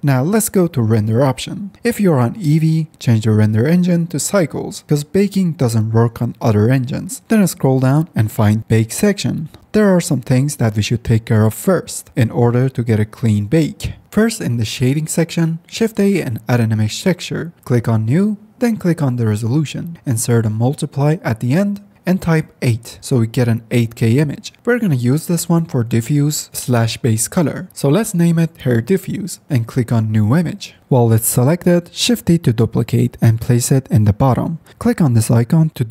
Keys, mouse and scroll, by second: 11.7 middle click, 14.2 middle click, 14.5 shift+a, 29.3 f, 33.4 shift+d.